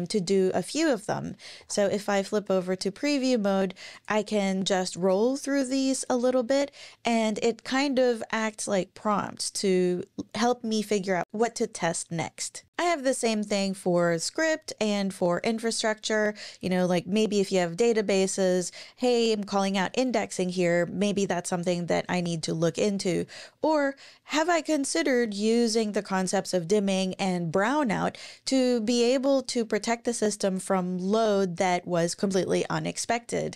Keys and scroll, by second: 1.6 super+e.